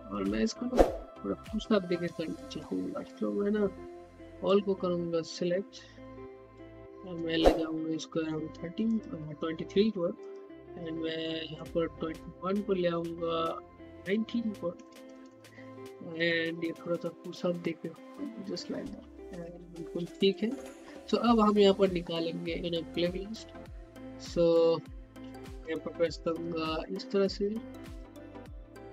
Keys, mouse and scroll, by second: 3.2 middle click, 4.4 click, 7.4-8.8 middle drag, 8.8 click, 10.8 middle click, 11.5 click, 12.5-14.7 middle drag, 14.7-15.2 typing, 15.8 click, 17.2-17.7 typing, 18.9 typing, 20.2-26.0 drag.